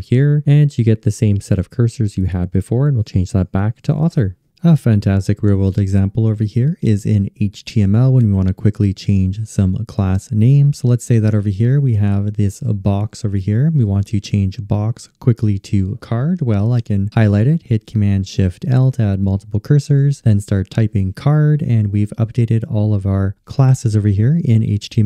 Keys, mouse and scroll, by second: 17.9 shift+super+l.